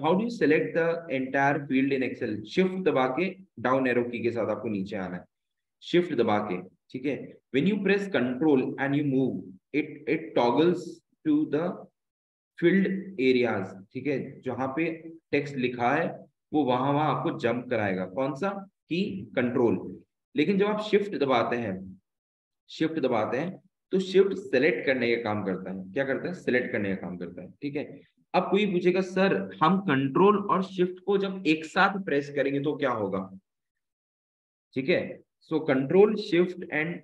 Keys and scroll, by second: 19.9 ctrl+Up, 20.3 ctrl+Up, 20.9 Up, 22.6 Down, 23.8 shift+Down, 24.0 shift+Down, 24.2 shift+Down, 24.4 shift+Down, 24.6 shift+Down, 24.8 shift+Down, 25.0 shift+Down, 25.5 shift+Down, 26.0 shift+Down, 26.8 Up, 28.5 Down, 29.4 Up.